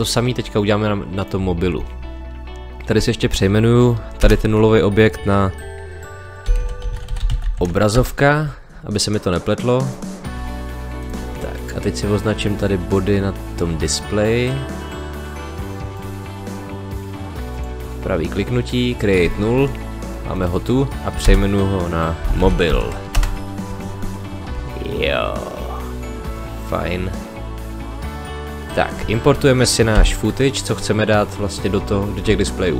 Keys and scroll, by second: 4.2 Return, 6.4 o, 7.9 Return, 21.2 Return, 22.2 m, 23.1 Return, 30.0 ctrl+i.